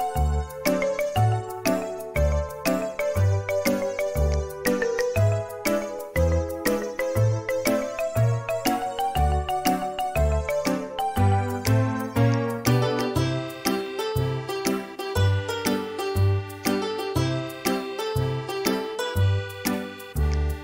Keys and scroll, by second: 1.3 space, 2.3 i, 11.7 space, 15.1 Delete, 17.7 Delete.